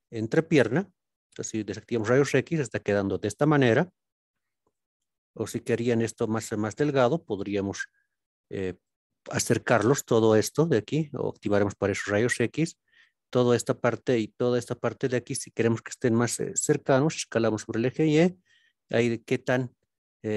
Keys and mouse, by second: 0.5-1.3 middle drag, 1.7 alt+z, 2.2-5.2 middle drag, 7.6 KP_3, 8.8 1, 9.8-11.0 drag, 11.4 alt+z, 12.3 click, 13.9 shift+click, 16.9 y.